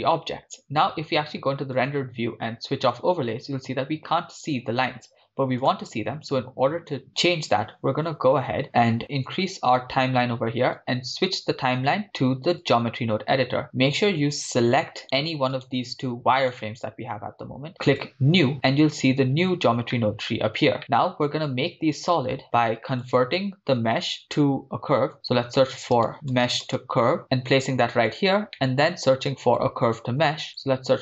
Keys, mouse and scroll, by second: 2.0 drag, 2.8-4.1 drag, 5.6-8.0 drag, 8.6 click, 9.7-10.8 drag, 11.7-13.6 drag, 15.0 right click, 16.4 right click, 17.8 right click, 17.9-18.5 drag, 18.5 middle click, 18.9-19.9 scroll up 8, 19.9 middle click, 20.5 scroll up 1, 22.4 shift+a, 28.6-29.3 middle drag, 29.3-29.8 drag, 30.3 shift+a.